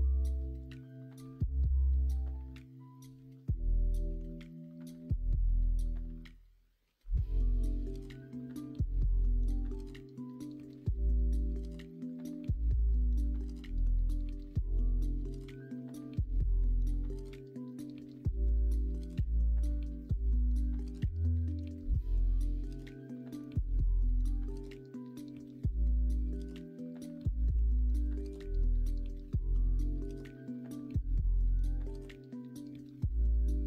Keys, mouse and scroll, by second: 3.9 middle click, 4.2 alt+z, 4.5 middle click, 5.0-7.4 middle drag, 7.8 ctrl+z, 8.3 middle click, 12.2 middle click, 12.5 alt+z, 12.8 middle click, 16.7 middle click, 17.2 e, 18.6 alt+z, 18.9-20.5 middle drag, 20.6 alt+z, 21.6 ctrl+z, 22.3 ctrl+z, 22.5 middle click, 23.4 shift+d, 24.2 middle click, 26.4 click, 27.5 f, 28.0 e, 30.5 middle click, 31.4 middle click, 33.1 click, 33.3 scroll up 1, 33.4-33.6 middle drag.